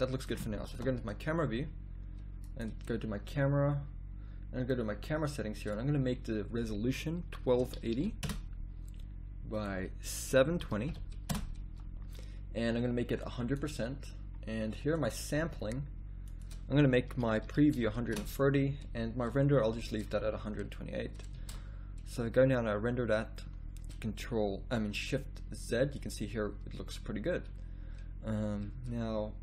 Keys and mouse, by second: 0.7 KP_0, 1.4 a, 2.5 click, 9.6-11.4 drag, 13.2-19.2 drag, 21.7 shift+z, 23.4-24.8 middle drag.